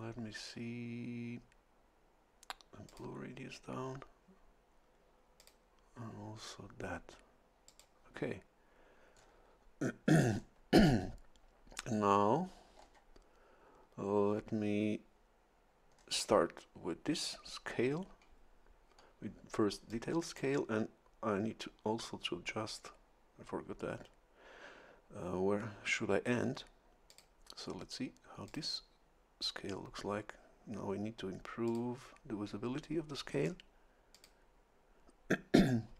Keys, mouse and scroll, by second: 2.9 click, 5.4 click, 7.7 click, 9.1-9.4 scroll down 1, 10.3 scroll up 1, 12.8 scroll down 1, 15.9-16.6 scroll up 1, 17.1 click, 19.9 click, 27.1 click, 28.5 click, 31.7 click, 34.1 click.